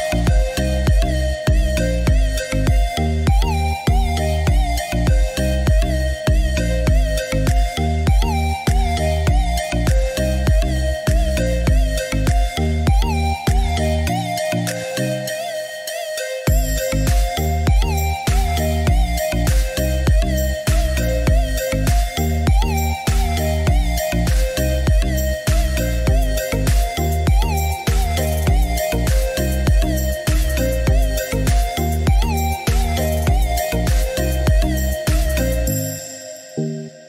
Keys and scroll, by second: 2.3 2, 2.5 0, 3.0 Return, 4.7 Escape, 33.7 4, 33.9 0, 35.2 Return.